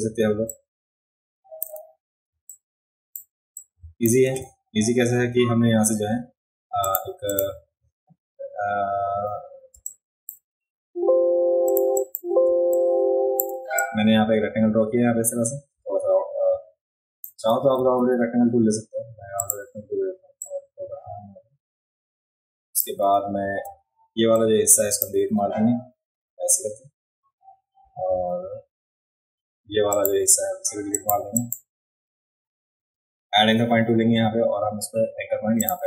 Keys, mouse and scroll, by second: 0.5-1.6 drag, 2.3 space, 2.5 click, 3.6 click, 6.9 click, 7.3 click, 8.9 click, 9.2 click, 9.6 click, 9.7 space, 9.9 click, 11.7 click, 12.0 click, 12.5 space, 12.7 click, 13.8-16.0 drag, 17.8 ctrl+z, 19.4 click, 20.4-22.8 drag, 23.7 a, 24.4 click, 29.9 click, 31.0 click, 31.4 click, 35.6 click.